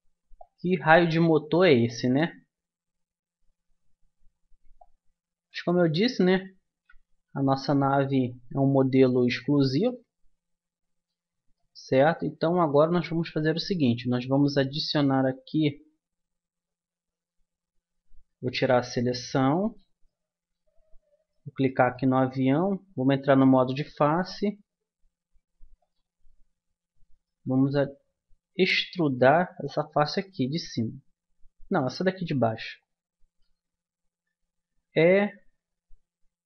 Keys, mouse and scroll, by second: 0.3-2.1 drag, 2.3 middle click, 4.7-6.1 drag, 6.1 middle click, 6.7 Tab, 8.5 Tab, 13.4-16.1 middle drag, 14.9 Tab, 16.1 Tab, 18.7 a, 22.1 Tab, 25.8-27.1 drag, 27.1 middle click, 27.5-28.9 right drag, 31.8-33.3 right drag, 33.3 click, 34.8 e.